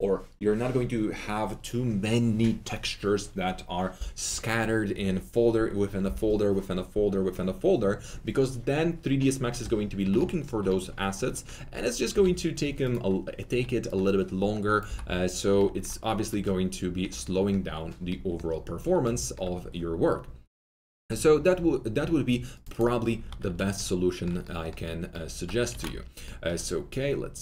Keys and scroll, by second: 12.1 alt+4, 13.4 4, 14.8 Delete, 19.7 alt+2, 23.2 alt+2, 26.2 ctrl+alt+z.